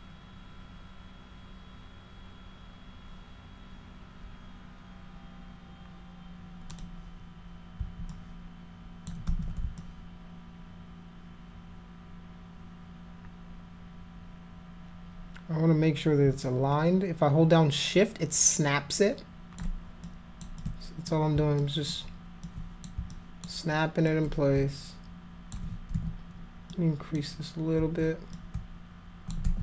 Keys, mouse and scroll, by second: 6.8 click, 8.1 click, 9.3 ctrl+z, 9.8-19.6 alt+drag, 20.1 alt+click, 20.6 alt+click, 21.6 alt+click, 22.5 alt+click, 23.1 alt+click, 24.1-25.6 alt+drag, 26.0 ctrl+z, 26.7 click, 28.4 shift+click, 29.4 ctrl+z.